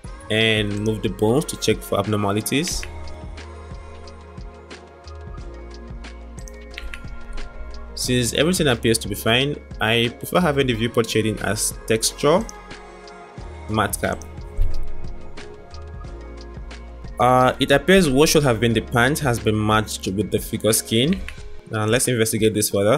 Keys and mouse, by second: 0.4 click, 2.7 r, 5.0 middle drag, 6.8 r, 8.2 click, 9.5-14.9 drag, 16.4-17.0 middle drag, 17.7-18.2 drag, 18.2-18.8 middle drag, 18.8 drag, 19.0-21.1 middle drag, 21.1 Tab, 22.4-22.9 middle drag.